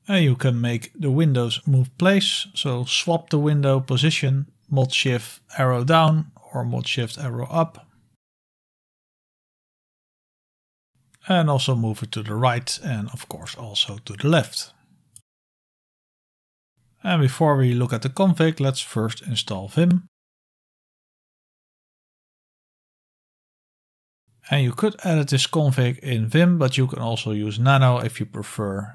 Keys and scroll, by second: 6.8 shift+super+Down, 8.6 shift+super+Down, 10.9 shift+super+Down, 10.9 shift+super+Up, 13.4 super+Return, 15.2 shift+super+Right, 16.7 Escape, 16.7 Return, 16.7 ctrl+l, 16.7-22.6 typing, 22.7 Return, 23.6 Return, 24.0 ctrl+l, 24.0 ctrl++, 24.0-26.4 typing.